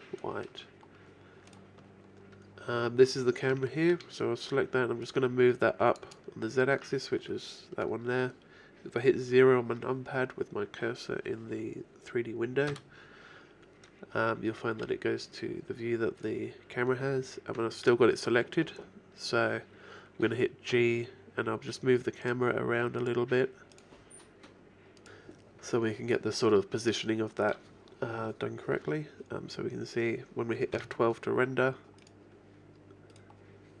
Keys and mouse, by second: 1.5-3.5 right drag, 4.6 shift+middle click, 5.1 shift+click, 12.7 KP_0, 16.6-19.1 middle drag, 20.7 g, 22.9-25.0 drag, 32.1-33.8 right drag.